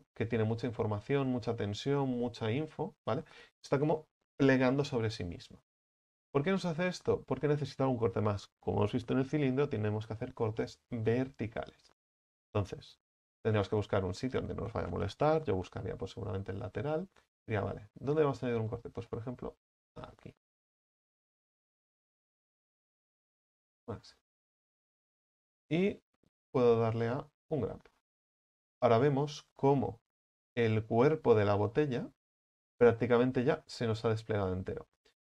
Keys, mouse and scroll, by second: 6.5-6.9 scroll down 5, 11.6-13.1 middle drag, 13.1 KP_1, 14.4-15.5 middle drag, 15.5 KP_3, 16.4-18.1 scroll up 8, 18.1 right click, 18.5-19.1 scroll down 5, 19.1 shift+middle click, 19.9-20.4 scroll up 5, 20.8 ctrl+right click, 23.7 u, 24.0-24.5 scroll down 6, 24.5 a, 24.6 a, 27.4 u, 29.7-35.2 middle drag.